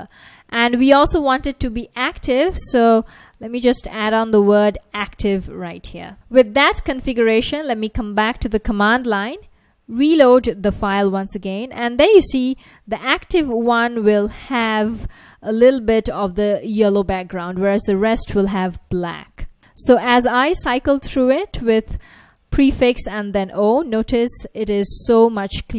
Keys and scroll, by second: 4.0-6.1 typing, 7.3 super+Tab, 9.5 ctrl+a, 9.9 r, 14.6 F1, 18.3 F1, 22.0 ctrl+a, 22.5 o, 23.6 ctrl+a, 24.8 o, 24.9 ctrl+a, 25.1 o.